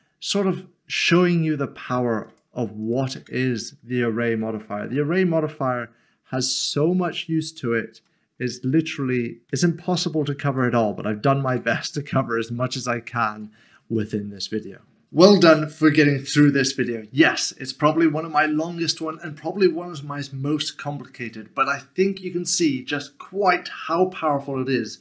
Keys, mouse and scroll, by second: 0.5 Tab, 0.7 middle click, 2.3 click, 3.2 Tab, 4.8 ctrl+b, 8.4-9.5 scroll up 1, 11.5 Tab, 11.8 middle click, 14.0 middle click.